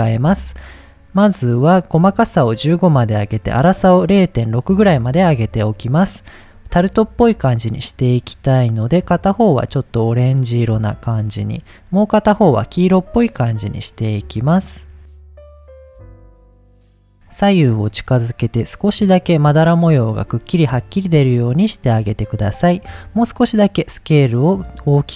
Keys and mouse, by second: 0.3 middle click, 2.2 click, 3.4-4.9 drag, 7.7 click, 8.3 drag, 12.2 click, 13.3 drag, 15.6 click, 17.1-18.0 drag, 18.6 click, 19.5 click, 20.9 middle click, 21.9-22.5 middle drag, 23.2-25.1 drag.